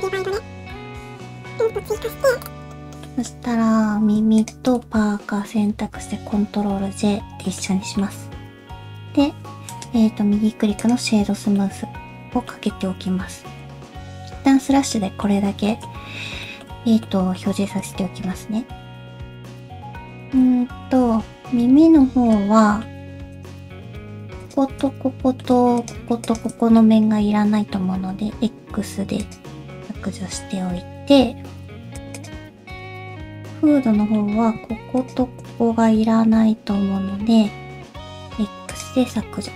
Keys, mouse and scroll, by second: 9.3 ctrl+j, 9.3 middle click, 9.7 right click, 11.3 scroll down 1, 11.5 middle click, 12.6-13.9 scroll up 2, 14.4 /, 14.9 middle click, 15.6 shift+middle click, 15.9-16.2 scroll up 3, 16.4 shift+middle click, 17.0 middle click, 17.6 shift+middle click, 17.8-18.2 scroll up 1, 18.2 Tab, 19.3 click, 19.3 middle click, 19.3 scroll up 2, 19.7 1, 20.2 alt+a, 21.0 l, 21.9 shift+h, 22.6 middle click, 23.0 3, 23.3 click, 23.7 middle click, 24.4 shift+click, 24.8 middle click, 25.7 shift+click, 26.2 shift+click, 26.6 scroll down 1, 26.7 middle click, 27.9 scroll down 1, 28.1-29.3 scroll up 1, 28.1 x, 29.7 middle click, 31.3 alt+h, 31.9 click, 32.0 alt+a, 32.0 shift+middle click, 32.0 1, 32.0 3, 32.1 click, 32.7 click, 33.1 middle click, 35.0 shift+click, 35.5 middle click, 37.1 middle click, 38.2 x, 39.1 middle click.